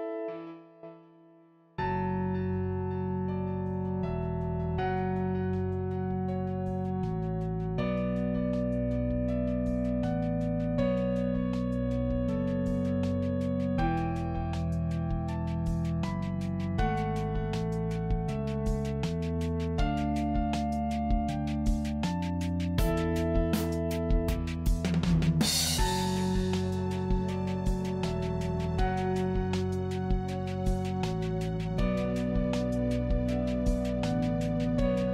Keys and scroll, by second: 9.6 ctrl+alt+z, 10.9 ctrl+alt+z, 13.7 ctrl+alt+z, 21.0 ctrl+alt+z, 25.5 ctrl+d.